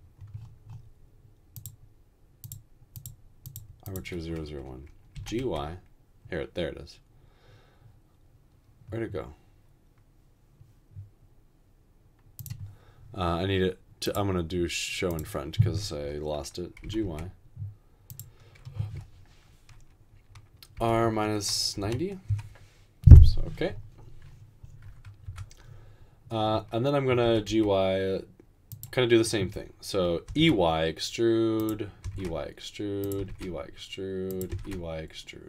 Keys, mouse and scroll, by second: 5.3 typing, 16.9 typing, 20.8-23.0 typing, 25.3 typing, 27.2 typing, 30.1-30.9 typing, 32.0 typing, 33.2 typing, 34.7 typing.